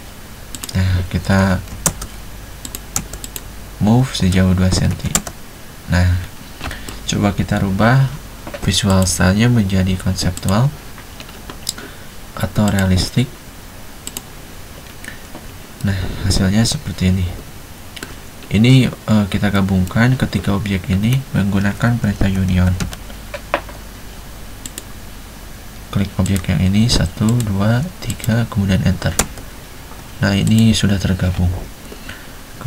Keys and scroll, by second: 1.8-3.0 typing, 5.1 2, 22.1-23.4 typing, 29.4 space, 32.0 Escape.